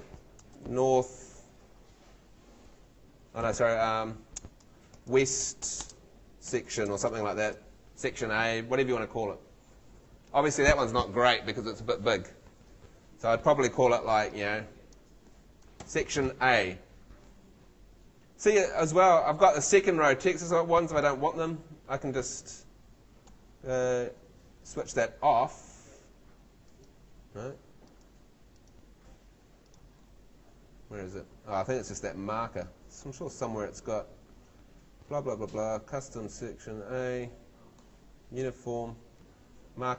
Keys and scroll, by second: 2.7 o, 3.4 BackSpace, 4.6-8.1 typing, 15.8 shift+a.